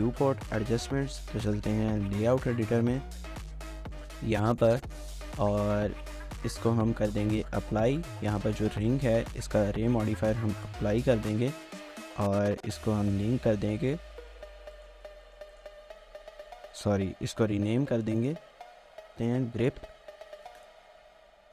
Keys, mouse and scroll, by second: 1.5 ctrl+s, 1.7 ctrl+s, 1.9 ctrl+s, 3.0 scroll down 1, 3.3 scroll up 1, 3.4 scroll down 1, 3.6 shift+middle click, 4.1 scroll down 1, 4.5 shift+middle click, 5.0 scroll up 1, 5.2 shift+middle click, 5.8 scroll up 1, 6.1 shift+middle click, 10.4 ctrl+a, 11.8 scroll up 1, 12.0 shift+middle click, 13.1 shift+click, 14.2 shift+middle click, 15.2 shift+middle click, 16.8 shift+middle click, 18.2 double click, 19.3-20.7 typing.